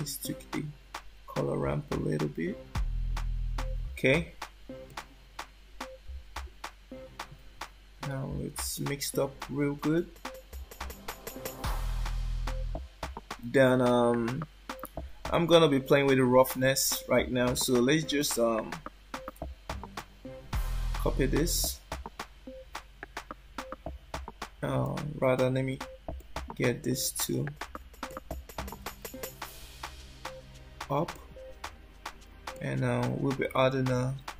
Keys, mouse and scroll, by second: 4.9 shift+middle click, 7.6-8.0 scroll down 2, 8.7 shift+middle click, 18.2 shift+middle click, 19.9 click, 24.8 click, 25.3 click, 26.1 click, 28.0 shift+middle click, 29.6 shift+d, 32.6 shift+middle click, 33.9 shift+a.